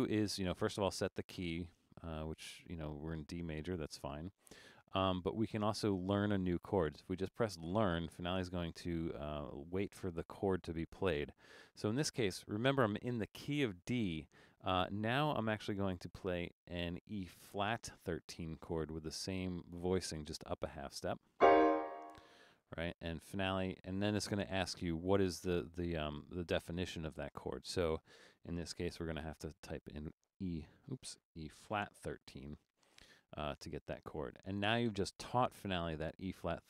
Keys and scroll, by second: 28.8-32.8 typing.